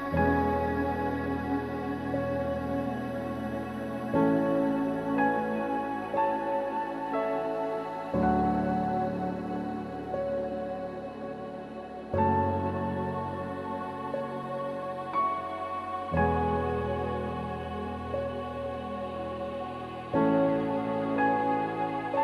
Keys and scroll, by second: 13.7 ctrl+g.